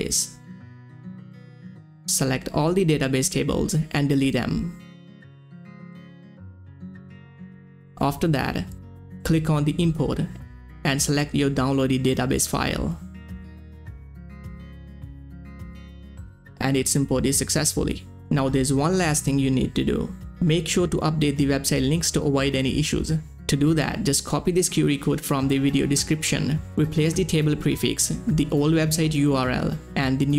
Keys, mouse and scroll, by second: 1.0 click, 1.0 click, 3.4 click, 3.5 click, 5.7 click, 5.7 click, 7.4 click, 7.4 click, 9.2 click, 9.2 click, 11.2 click, 11.2 click, 13.6 scroll down 1, 14.3 click, 20.3 middle click, 20.3 click, 24.7-26.5 drag, 26.5-30.3 drag.